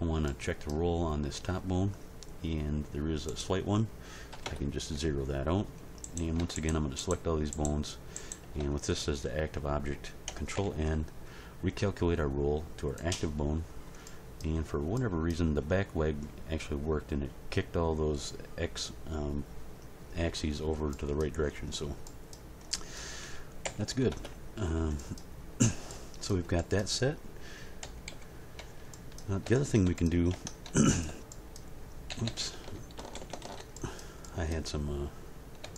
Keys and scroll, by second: 4.3 0, 4.4 Return, 10.5 ctrl+n, 23.6 g, 24.1 Return, 27.8 End, 28.1 Page_Down, 30.3 Tab, 32.1 a, 33.0 alt+r, 33.2 alt+g, 33.4 alt+s.